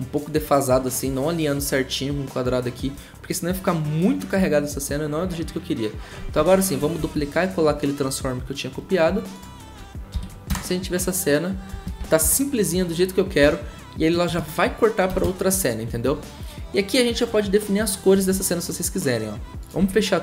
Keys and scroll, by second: 6.4 ctrl+d, 7.0 ctrl+v, 10.1 shift+`, 10.5 shift+0, 12.2 0, 13.4 0, 15.1 v.